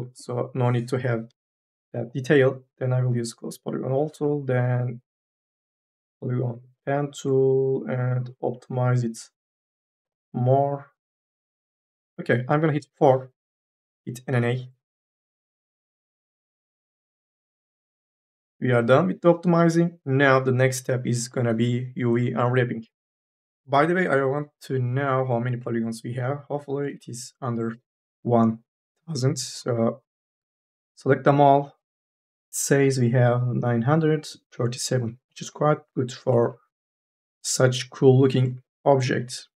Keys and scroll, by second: 0.3 y, 1.1 Delete, 4.0 1, 12.6 4, 14.1 n, 26.7 3, 29.4 e, 29.9 3, 30.7 ctrl+a, 36.7 4, 37.0 e.